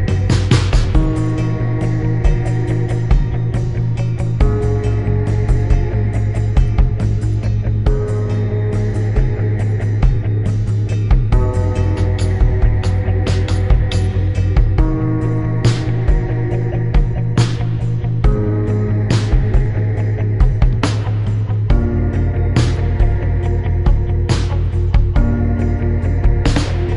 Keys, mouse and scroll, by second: 1.0 click, 1.4 click, 3.0 click, 3.5 click, 5.6 click, 6.6 click, 9.8 click, 10.4 click, 11.4 click, 12.2 click, 13.2 click, 14.7 shift+click, 15.7 click, 17.0 click, 19.7 click, 20.8 click, 21.3 right click, 22.4 right click, 23.2 click.